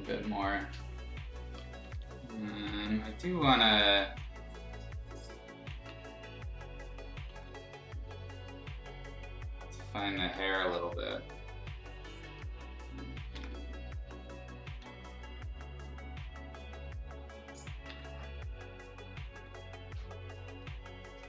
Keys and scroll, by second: 1.7 [, 1.9 [, 2.8 z, 3.3 b, 4.2 ctrl+z, 5.7 ctrl+z, 7.3 ctrl+z, 10.4 e, 13.3 ctrl+z, 14.8 ctrl+z, 17.8 ctrl+z, 19.3 ctrl+z, 20.5 ctrl+z.